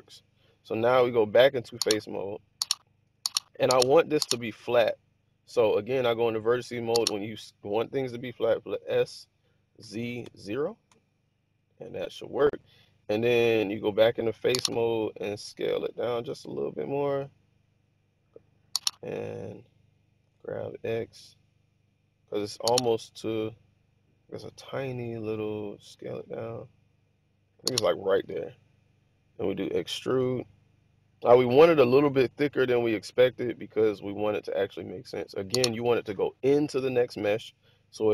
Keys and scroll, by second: 8.6 s, 9.7 z, 10.1 0, 10.8 Return, 15.9 s, 20.2 g, 20.5 x, 23.1 1, 24.8 typing, 25.9 typing, 28.2 typing, 30.2 typing.